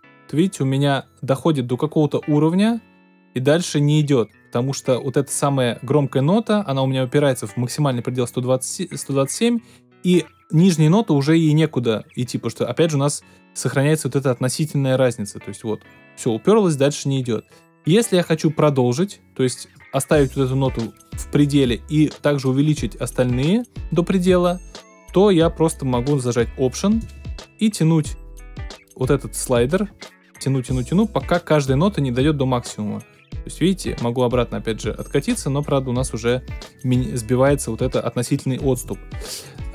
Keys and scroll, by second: 38.7 super+z.